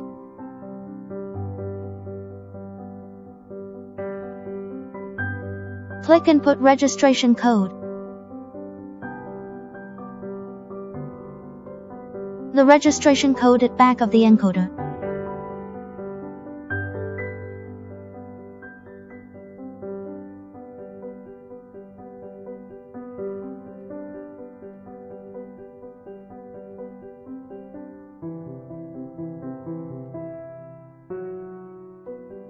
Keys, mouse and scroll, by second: 0.0 click, 4.7 click, 6.3 click, 10.2 click, 18.0 click.